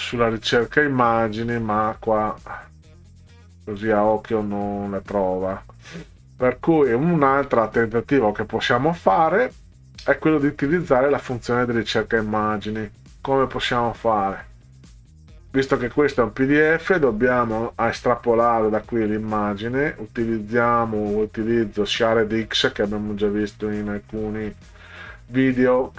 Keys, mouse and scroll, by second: 0.1 scroll down 2, 0.6-1.1 scroll down 4, 1.7 scroll down 2, 2.6-3.4 scroll down 6, 4.1-5.4 scroll down 8, 5.9-6.5 scroll down 4, 7.0-7.6 scroll down 4, 8.1-9.2 scroll down 6, 10.4 scroll down 2, 11.6 scroll down 2, 14.0 click, 15.7 click, 18.4 click, 22.6 right click.